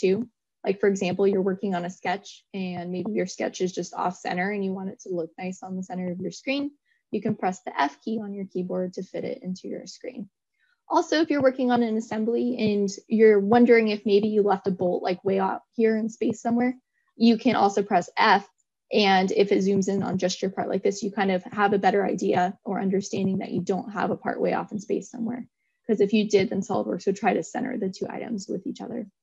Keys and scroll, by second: 4.9 f.